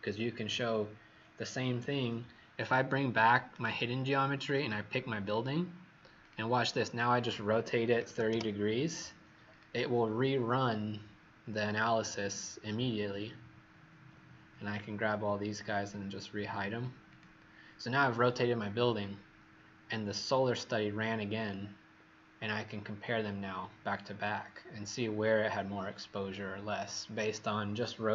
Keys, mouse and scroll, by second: 3.5 right click, 4.4 click, 7.9 KP_3, 8.0 KP_0, 8.3 KP_Enter, 9.4 click.